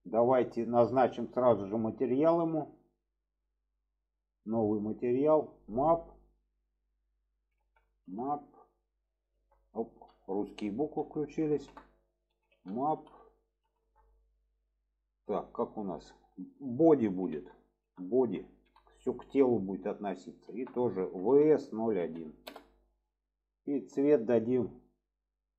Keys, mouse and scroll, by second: 0.2 click, 3.3 click, 5.2-23.1 drag, 24.2 click.